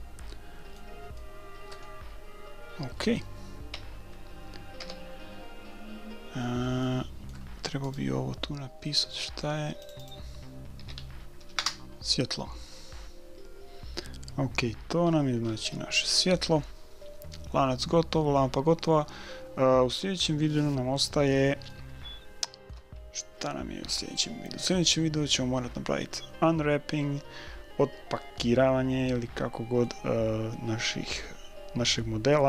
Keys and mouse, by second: 1.2-3.0 middle drag, 3.7 KP_1, 4.0 KP_1, 4.8 KP_5, 5.9 middle click, 7.0-8.6 middle drag, 7.8 click, 9.3 right click, 9.8 click, 15.1-16.8 middle drag, 18.8-23.4 middle drag, 29.1-32.4 middle drag.